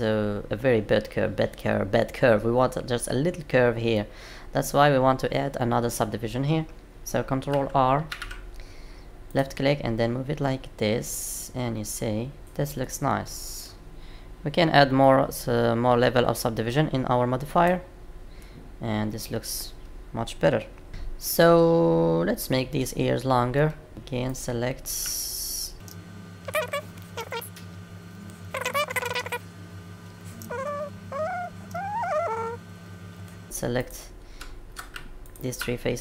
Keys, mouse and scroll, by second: 3.9 middle click, 8.1 ctrl+r, 12.8 middle click, 17.4 click, 18.3 middle click, 23.5 middle click, 23.9 click, 24.3 click, 25.2 ctrl+click, 26.4 g, 26.5 middle click, 27.1 g, 28.1 click, 28.2 middle click, 28.5 click, 28.7 middle click, 29.0 ctrl+click, 29.2 middle click, 30.3 g, 30.8 middle click, 31.6 g, 32.1 middle click, 32.8 click, 32.9 middle click, 33.4 click, 33.7 click, 35.2 ctrl+click.